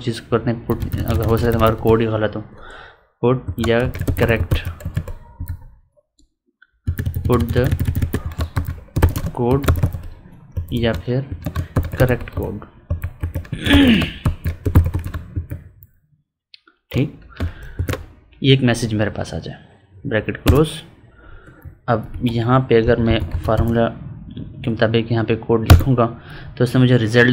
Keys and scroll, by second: 8.1 space, 9.0 space, 10.7 space, 11.3 space, 13.7 space, 21.4 Up.